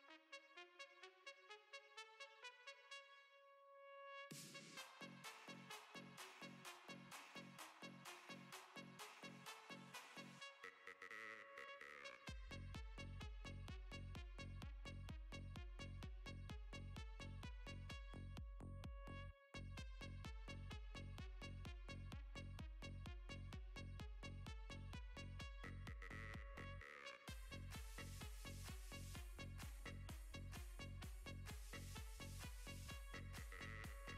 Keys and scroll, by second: 23.0 s.